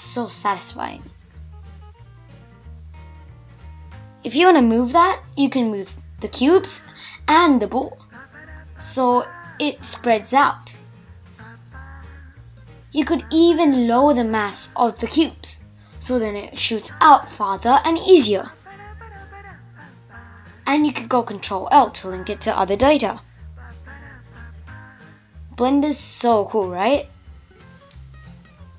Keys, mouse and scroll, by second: 0.7-1.2 scroll down 1, 1.2-2.4 middle drag, 2.4-3.3 scroll down 1, 3.3 shift+Left, 3.7 space, 4.2 space, 5.4-6.1 scroll up 2, 6.1 scroll up 2, 6.2 scroll down 1, 6.3-9.3 middle drag, 12.6 space, 13.1-15.8 drag, 15.8 shift+Left, 16.2 space, 16.9-18.1 middle drag, 18.1-19.2 scroll up 4, 19.3-20.0 middle drag, 20.0-21.2 scroll down 2, 24.5 space, 26.4 click.